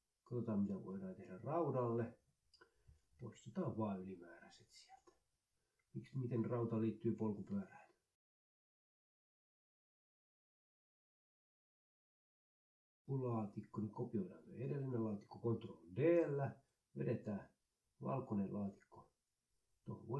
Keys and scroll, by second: 0.0-0.5 typing, 0.6 ctrl+Left, 0.8 Delete, 4.3 Delete, 5.0 Delete, 5.7 Delete, 6.8 Left, 7.3-11.4 typing, 9.2 Delete, 9.4 ctrl+Right, 11.5 Right, 11.8 shift+Down, 11.9 Delete, 14.7 ctrl+d.